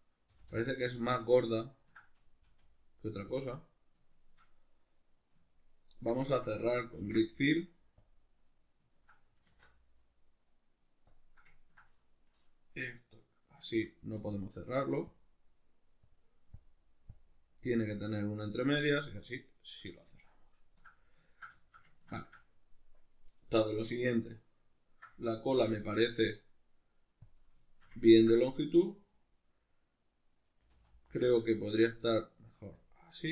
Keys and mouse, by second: 0.3 g, 1.2 click, 1.3-3.4 ctrl+middle drag, 2.5 s, 3.4 click, 4.1-32.9 shift+middle drag, 7.0 ctrl+f, 9.5 alt+q, 13.7 F9, 25.5 alt+q, 30.7 g, 32.9 click.